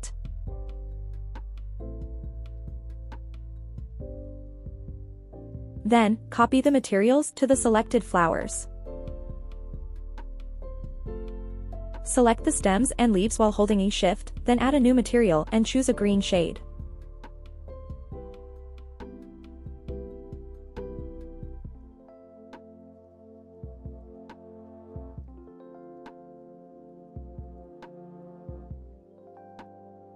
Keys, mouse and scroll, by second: 4.5-5.5 scroll down 2, 5.5-7.5 scroll down 4, 8.0-9.1 scroll up 7, 9.5 click, 11.4-11.7 scroll down 2, 11.7-12.1 scroll up 2, 12.7 click, 13.1 scroll up 1, 14.2 shift+click, 15.5 shift+click, 16.8 shift+click, 17.3 shift+click, 19.1 click, 20.6 click.